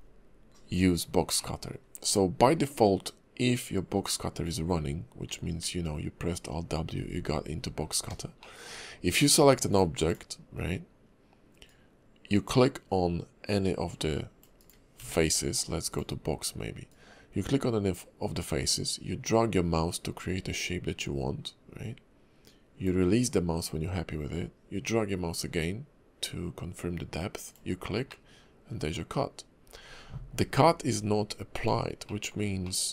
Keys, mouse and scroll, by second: 1.4 middle click, 1.9-3.0 scroll down 1, 5.3 alt+w, 5.6 alt+w, 7.8-8.2 scroll up 2, 8.4 shift+middle click, 9.0 click, 9.7 click, 10.0 click, 11.6 click, 15.0 d, 16.9 click, 28.1 middle click, 32.0 shift+middle click, 32.6 middle click.